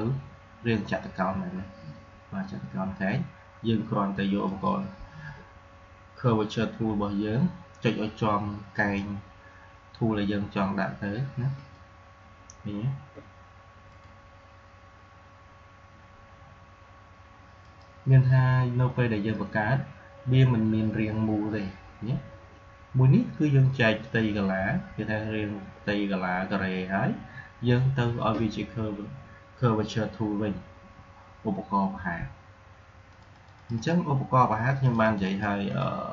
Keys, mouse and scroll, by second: 4.4 click, 8.6 click, 11.5 click, 13.8 click, 17.6 click, 33.0 click.